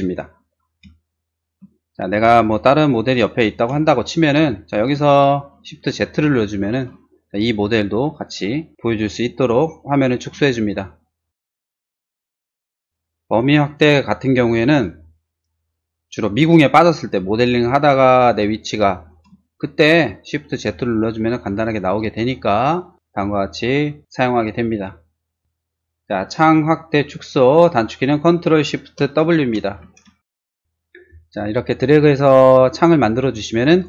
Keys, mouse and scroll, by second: 0.3-0.8 scroll down 2, 1.1 shift+middle click, 1.9 shift+middle click, 2.1 shift+r, 2.4 click, 3.1 click, 3.6 space, 4.3-4.9 scroll up 2, 5.1 middle click, 6.1 shift+z, 8.7 ctrl+z, 9.6 shift+middle click, 10.5 shift+middle click, 10.7 shift+middle click, 10.8 shift+middle click, 11.3 shift+middle click, 11.9 shift+click, 12.0 shift+middle click, 17.4 middle click, 17.6 middle click, 18.0 middle click, 18.8 middle click, 19.5 shift+middle click, 20.3 middle click, 21.6 shift+z, 22.7 middle click, 23.5 scroll down 1, 23.9 shift+middle click, 25.0 shift+scroll down 1, 30.2 space, 30.6 middle click, 31.1-33.8 ctrl+shift+drag.